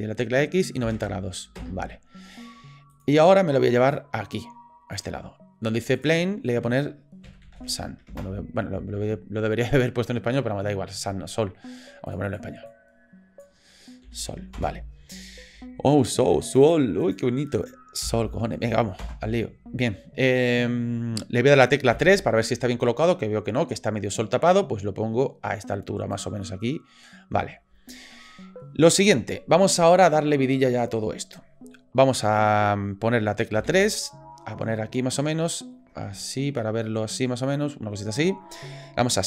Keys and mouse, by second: 4.0 click, 6.1-9.3 drag, 12.1 click, 12.2-15.0 drag, 16.6-19.6 drag, 21.9 KP_3, 24.5-26.1 drag, 26.5 middle click, 33.5 KP_3, 35.2 middle click, 36.7-37.9 drag.